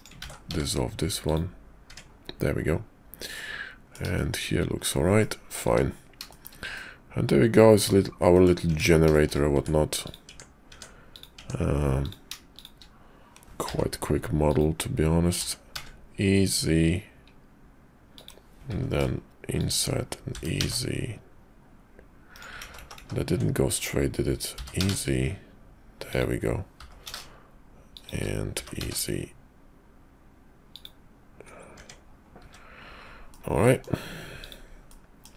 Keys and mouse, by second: 0.2 ctrl+z, 0.4 x, 1.9 Tab, 3.3 click, 3.5 middle click, 4.1 shift+click, 4.2 shift+middle click, 5.2 middle click, 6.3 shift+middle click, 6.7-7.9 middle drag, 8.3 middle click, 8.8 Tab, 9.1 shift+click, 9.5 Tab, 10.0 click, 10.2 Tab, 10.7 Tab, 11.1 click, 11.4 Tab, 12.0 click, 12.5 shift+click, 13.6 i, 15.3 e, 18.7 i, 20.3 e, 22.6 ctrl+z, 22.8 ctrl+z, 23.0 ctrl+z, 24.5 e, 26.8 i, 28.5 e, 31.7 Tab, 32.4 `, 33.3 click, 34.4 click.